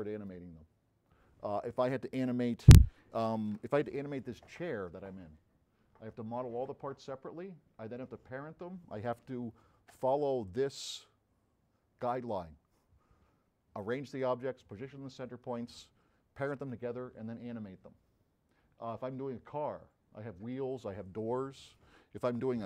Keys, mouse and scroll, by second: 10.9 click.